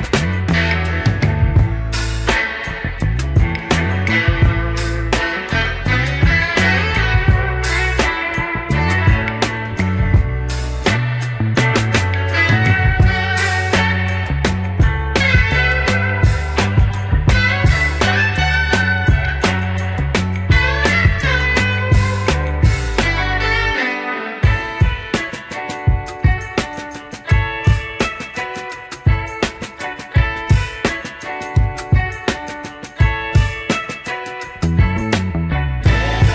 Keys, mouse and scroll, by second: 6.7 scroll down 2, 7.0 shift+middle click, 7.6 Tab, 8.2 Tab, 9.0 alt+click, 9.9 ctrl+b, 13.3 Tab, 13.6 click, 14.1 scroll down 2, 14.3-16.0 middle drag, 16.2 click, 17.3 Tab, 20.1 middle click, 20.8 click, 21.6 click, 22.3 shift+click, 23.7 j, 24.2 middle click, 25.4 click, 26.0 shift+click, 27.0 j, 27.2 click, 27.8 click, 30.3 Tab, 30.9 Tab, 31.8 shift+s, 33.2 Tab, 34.0 shift+s.